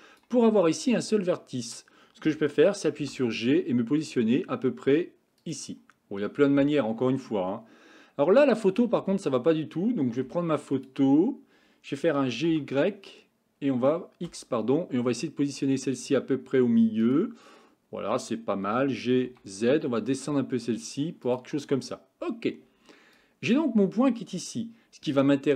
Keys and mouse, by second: 0.0 click, 3.1 g, 10.3 Tab, 10.9 click, 12.2 g, 18.8 g, 23.2-23.6 drag.